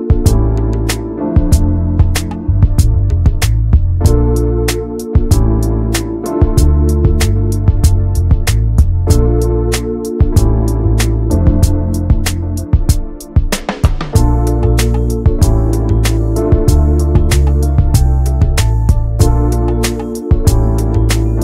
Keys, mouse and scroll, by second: 0.2 alt+middle click, 0.6 alt+z, 1.2 ctrl+click, 2.6 ctrl+click, 3.8-5.0 middle drag, 5.0 alt+z, 5.4-8.7 middle drag, 8.7 click, 9.2-12.0 middle drag, 12.0 Tab, 12.2 middle click, 12.5 ctrl+s, 12.8 shift+middle click, 13.1 click, 13.6 middle click, 14.0 Tab, 14.6 shift+a, 15.7 scroll down 2, 15.9 middle click, 16.6 scroll up 1, 16.9 ctrl+z, 17.1 middle click, 18.0 shift+right click, 18.4 shift+a, 20.0 shift+middle click, 20.6 alt+middle click.